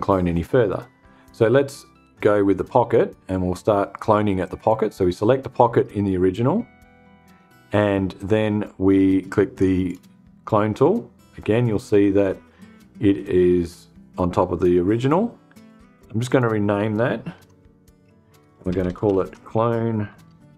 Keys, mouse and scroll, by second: 3.9 click, 9.3 click, 15.7 click, 16.8 F2, 17.8-20.5 typing.